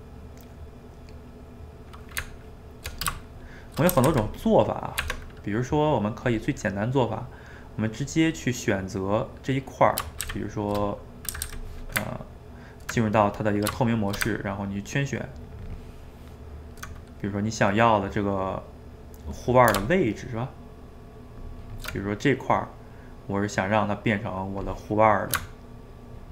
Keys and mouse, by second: 2.2 Tab, 3.2 shift+middle click, 3.6 shift+right click, 4.0 a, 4.1 a, 4.4 click, 4.8 middle click, 5.0 Tab, 5.7 middle click, 6.3 click, 6.8-10.3 middle drag, 10.3 shift+z, 10.9 middle click, 11.3 a, 11.5 a, 13.8 shift+middle click, 14.6 ctrl+right click, 17.0-20.0 middle drag, 20.2 ctrl+shift+right click, 22.1-25.1 middle drag, 26.0-26.3 ctrl+shift+right drag.